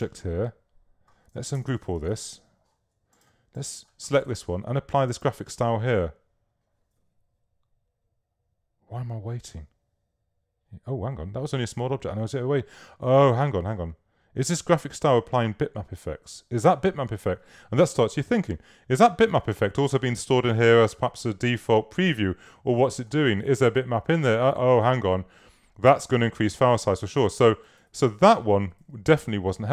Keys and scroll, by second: 1.6 shift+super+g, 27.2 super+z.